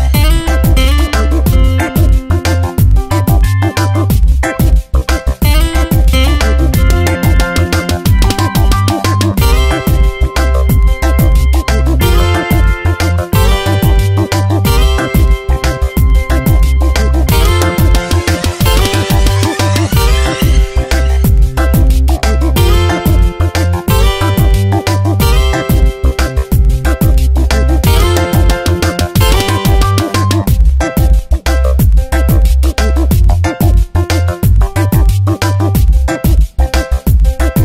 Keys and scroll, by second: 9.0 space, 11.6 space, 13.4 space, 18.5 space, 20.3 space, 23.2 space, 28.7 space, 33.1 space.